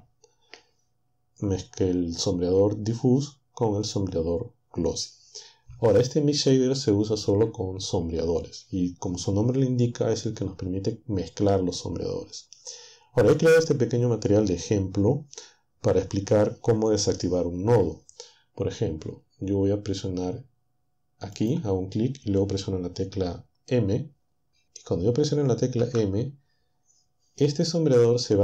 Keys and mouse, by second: 21.4-25.8 drag, 25.8 m.